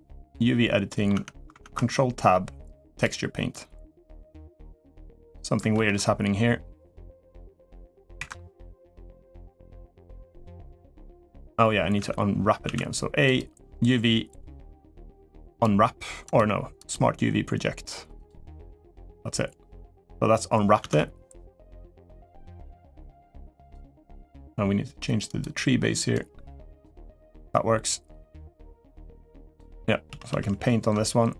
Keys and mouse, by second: 0.0 click, 0.6 middle click, 1.2 Tab, 3.3-5.1 drag, 5.5 ctrl+z, 7.0-8.0 drag, 11.8 Tab, 12.4 a, 13.1-15.4 drag, 16.0-18.0 drag, 20.6 Tab, 23.3 click, 25.9 click, 28.7 click, 29.9 ctrl+z, 30.1 ctrl+z.